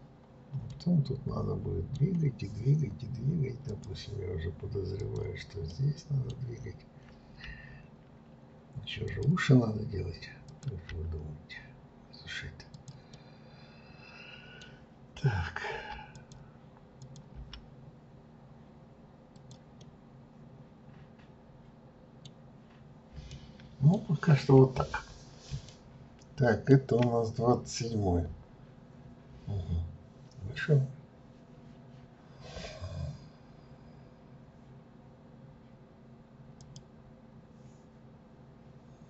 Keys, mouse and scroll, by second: 0.6 scroll up 1, 0.7-3.7 middle drag, 3.7-5.2 drag, 5.7-7.5 middle drag, 7.5 g, 10.5 click, 10.9 g, 13.1-15.7 middle drag, 15.7 g, 17.0 click, 17.4 g, 19.8-22.7 middle drag, 22.7-23.3 scroll down 2, 23.3-25.0 middle drag, 25.0 scroll up 1, 25.7-28.6 shift+middle drag.